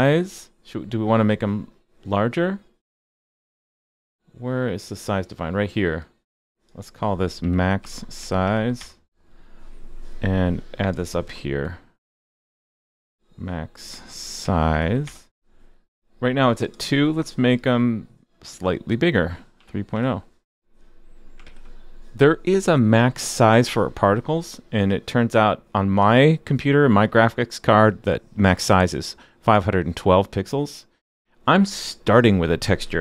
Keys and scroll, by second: 21.4 super+s.